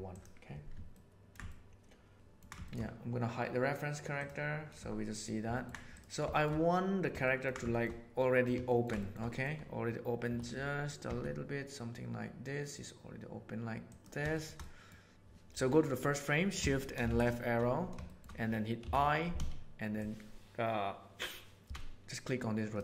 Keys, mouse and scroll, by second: 0.0 right click, 1.0 ctrl+middle click, 1.5-2.3 shift+middle drag, 2.1 ctrl+alt+a, 5.5 ctrl+middle click, 6.2 shift+middle click, 7.1 ctrl+middle click, 7.6 shift+middle click, 8.1 middle click, 8.6 ctrl+middle click, 8.9 shift+middle click, 9.2 middle click, 10.2 r, 14.2-14.7 shift+middle drag, 17.0 shift+Left, 18.0 middle click, 18.7 i.